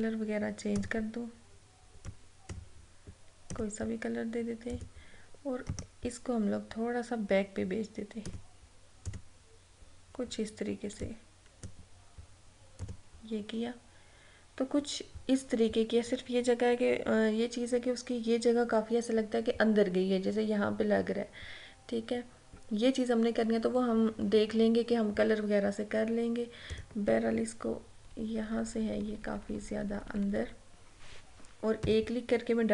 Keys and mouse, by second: 5.8 right click, 8.4-12.9 drag, 26.7 click, 28.0 Left, 31.8 a.